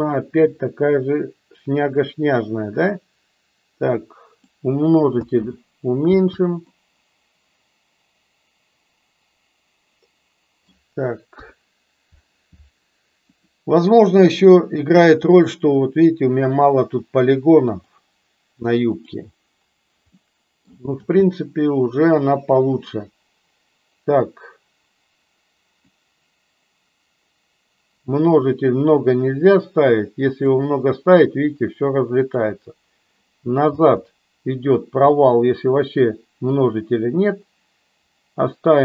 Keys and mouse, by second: 2.7-4.6 drag, 5.1 space, 6.4 space, 6.6-10.6 middle drag, 11.4 KP_1, 14.4-15.0 middle drag, 20.1-20.6 middle drag, 20.8 space, 26.0-30.7 drag, 32.5 click, 34.0 space, 35.1-38.8 drag.